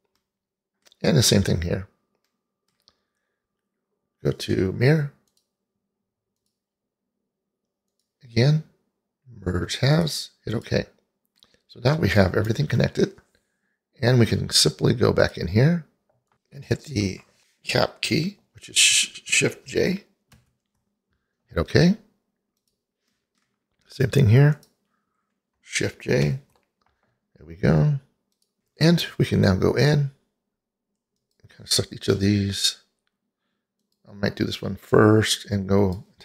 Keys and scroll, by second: 20.4 shift+j, 26.3 shift+j.